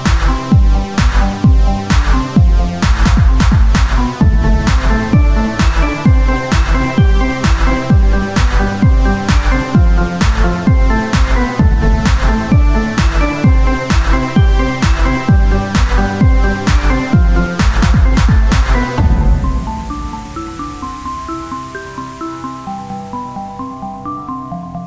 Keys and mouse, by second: 3.1 Tab, 7.1 Tab, 9.7 Tab, 9.7 Tab, 12.5 Tab, 16.8 Tab, 16.8-21.1 drag, 18.0 right click, 19.0 Tab.